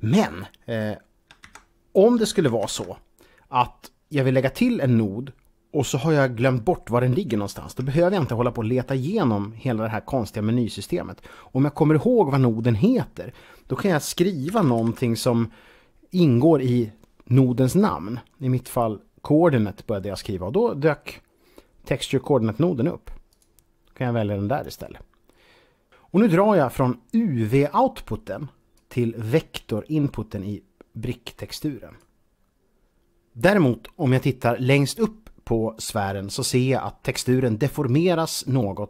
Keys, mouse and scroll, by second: 1.4 ctrl+z, 2.8 z, 7.7 shift+a, 12.6 a, 12.7 click, 14.2-14.7 typing, 23.1 click, 28.5 click.